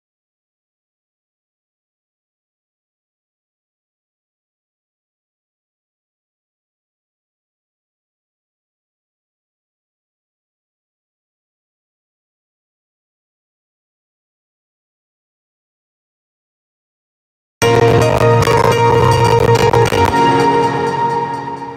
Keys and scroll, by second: 19.6 space.